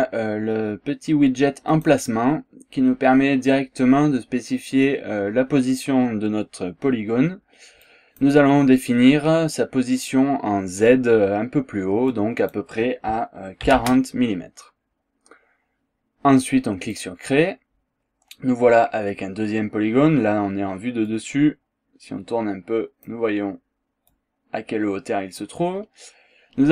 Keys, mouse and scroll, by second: 1.7 click, 7.8 click, 12.1 click, 13.6 KP_4, 13.7 KP_0, 16.9 click, 21.1-23.3 drag, 23.3 scroll down 1, 23.5 scroll up 1, 24.1-25.5 drag, 25.7 scroll down 1, 25.9 scroll up 1.